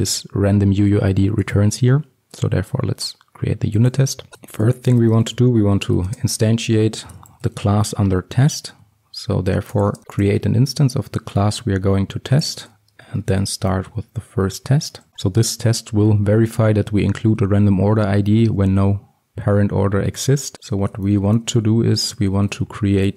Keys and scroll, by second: 4.7 Return, 9.9 Return, 14.5 Return, 15.1 ctrl+x, 21.7 Return.